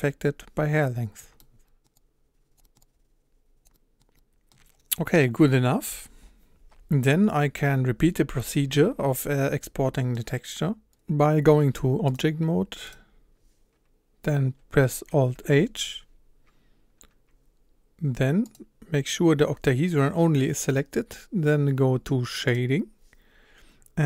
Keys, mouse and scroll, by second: 1.4-1.9 middle drag, 1.9-2.6 drag, 2.6 middle drag, 2.7-3.6 drag, 3.6-4.0 scroll up 1, 4.0 scroll down 1, 4.1-11.1 middle drag, 11.1-14.2 scroll up 1, 15.5 alt+h, 16.9 scroll up 1, 18.6 click, 18.8-19.1 scroll down 2, 19.1-20.7 scroll up 1, 22.6 click.